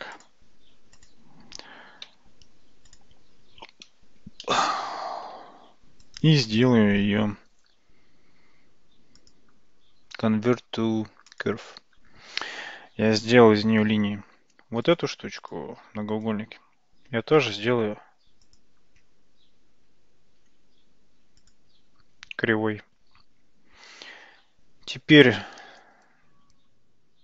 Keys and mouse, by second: 0.3 drag, 2.1 g, 4.5-5.3 shift+middle drag, 6.2-8.6 right drag, 9.3-11.5 drag, 14.9 click, 16.1-17.7 right drag, 18.5-21.6 drag.